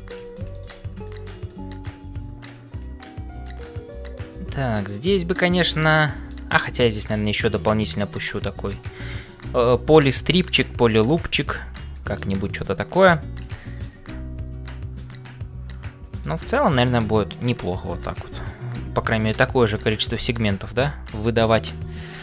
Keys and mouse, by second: 0.0-22.2 typing, 0.6 alt+click, 1.1 shift+middle click, 1.5-6.4 middle drag, 9.0 shift+middle click, 10.5 middle click, 11.9 shift+middle click, 12.4 middle click, 13.6 shift+middle click, 14.9-16.3 middle drag, 19.6 middle click.